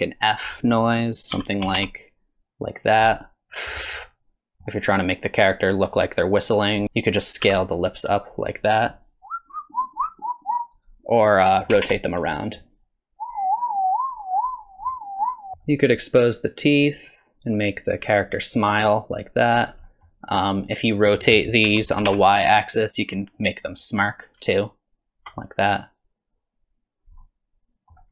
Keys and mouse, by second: 1.4 s, 3.1-4.6 middle drag, 5.2 click, 6.6 click, 6.8 s, 7.4 s, 11.7 r, 15.5 middle click, 17.0-19.7 drag, 19.9 middle click, 20.5 click, 21.7 r, 25.8 click, 26.3 click, 27.2 click.